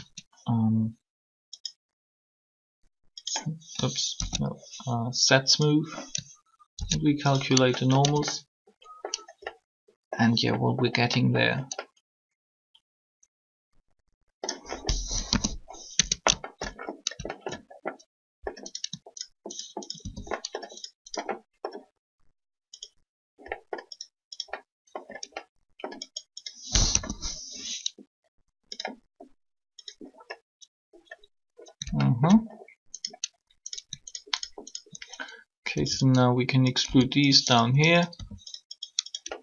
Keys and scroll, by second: 8.0 Tab, 15.3 3, 15.9 Tab, 26.8 3, 35.4 shift+e, 36.8 s, 38.1 r.